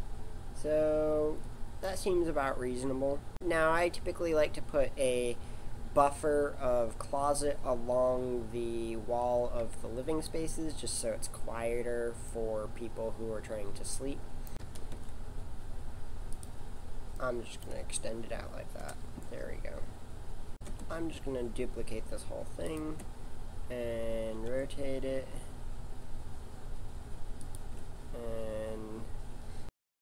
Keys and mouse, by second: 12.3-14.2 middle drag, 14.6 s, 18.8 KP_7, 19.4 middle click, 21.0 shift+d, 24.4 r.